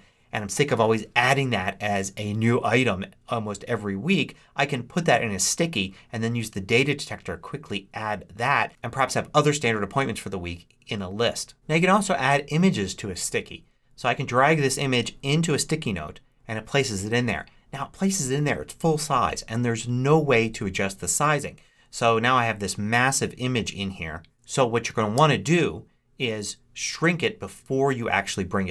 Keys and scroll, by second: 25.0 super+z.